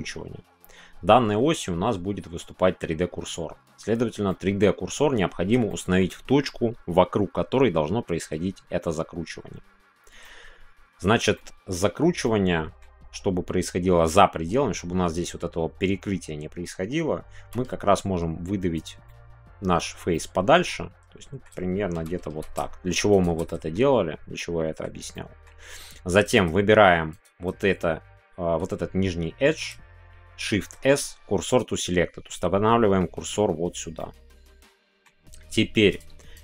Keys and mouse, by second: 4.3 middle click, 5.7 shift+middle click, 10.3 middle click, 11.3 shift+middle click, 12.2 middle click, 19.0 middle click, 19.7-22.6 middle drag, 22.6 shift+y, 23.1 shift+click, 23.4 middle click, 24.3 middle click, 25.1 middle click, 25.3 click, 25.4 middle click, 27.1 shift+click, 30.4 shift+s, 34.0-35.0 middle drag, 35.8 click.